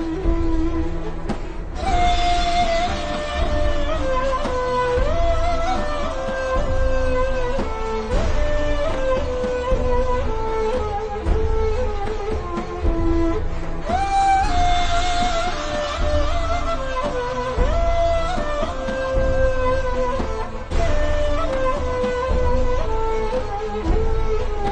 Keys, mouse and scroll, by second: 1.0 v, 1.2 click, 2.8 click, 3.7-4.4 alt+shift+scroll up 2, 4.8 click, 5.5-5.9 alt+shift+scroll up 2, 6.5 shift+m, 7.2 alt+click, 16.7 v, 17.0 click, 17.3 alt+shift+scroll down 1, 18.1 click, 19.8-20.4 alt+shift+scroll down 3, 20.9 click, 21.7-22.0 alt+shift+scroll up 3.